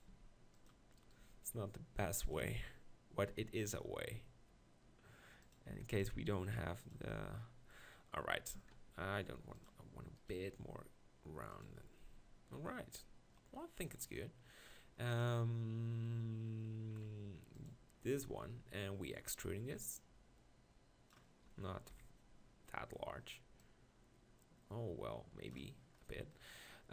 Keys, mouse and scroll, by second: 0.1 g, 1.2 g, 2.4 Tab, 3.3 g, 5.7 Tab, 6.2 g, 7.1 Tab, 8.6 Tab, 8.9 r, 10.6 r, 11.7 Tab, 21.9 KP_7.